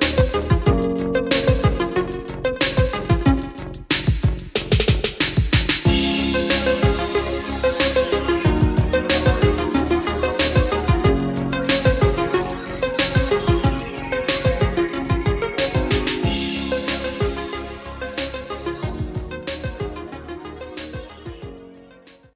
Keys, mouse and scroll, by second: 1.4 click, 5.6 click, 6.2 F4, 8.0 click.